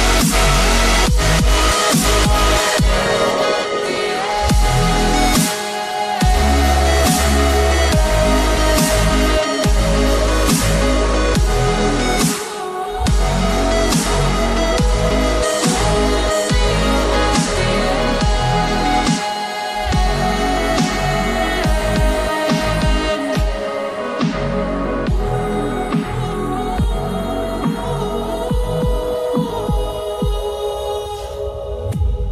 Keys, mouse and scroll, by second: 5.1 click, 12.1 right click, 15.9 click, 30.4-31.1 scroll down 1, 31.1-32.3 scroll down 1.